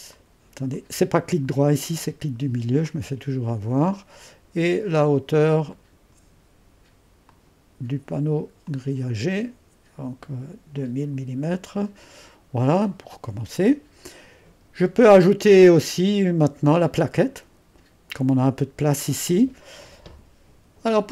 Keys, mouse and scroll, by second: 1.4 middle click, 1.9 middle click, 1.9 typing, 2.9-11.2 drag, 11.2-13.6 scroll down 1, 11.2 typing, 15.5-17.0 drag, 17.1-18.6 middle drag.